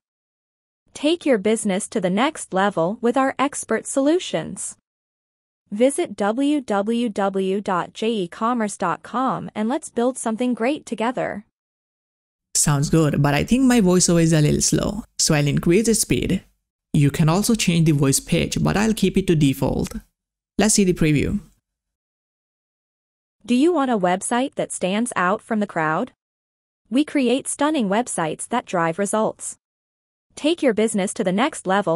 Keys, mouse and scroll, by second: 15.4 click, 18.4 click, 21.0 click, 21.0 click.